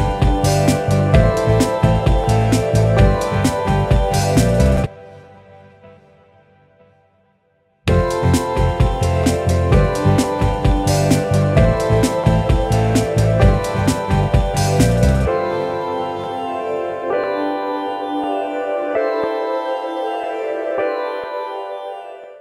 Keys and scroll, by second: 6.0 super+d, 7.8 space, 10.4 super+d, 11.4 super+d.